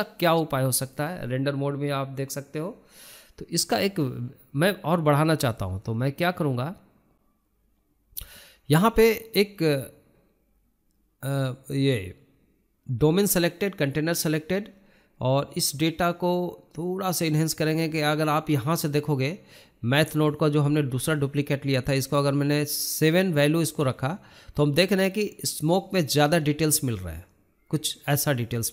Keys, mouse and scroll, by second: 8.9 n, 14.9-15.3 scroll up 2, 15.3 scroll down 1, 15.4-16.1 scroll up 1, 16.1 click, 17.3-23.5 drag, 24.4-26.5 drag.